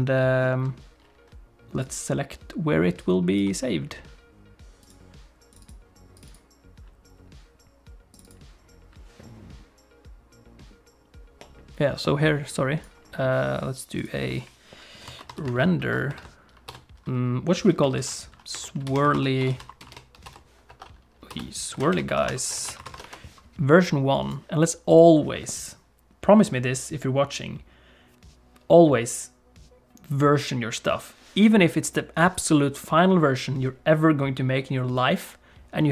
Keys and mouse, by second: 1.9 click.